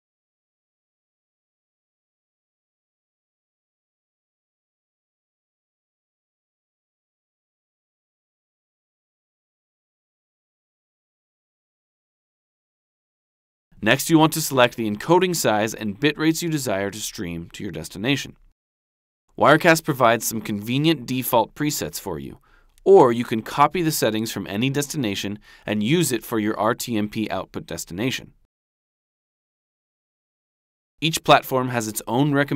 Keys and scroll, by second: 0.2 super+c, 1.9 super+Tab, 3.7 super+v, 7.8 super+c, 10.1 super+Tab, 12.6 super+v.